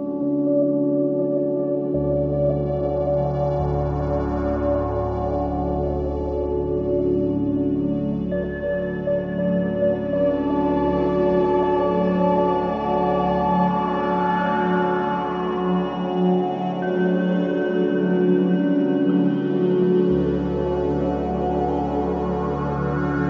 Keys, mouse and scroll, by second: 0.5 click, 2.1 click, 2.9-5.2 drag, 7.8 click, 9.1 ctrl+z, 9.5 click, 11.1 click, 12.7-14.1 drag, 15.2 click, 19.5-19.9 drag, 20.4 drag, 21.6-23.0 drag.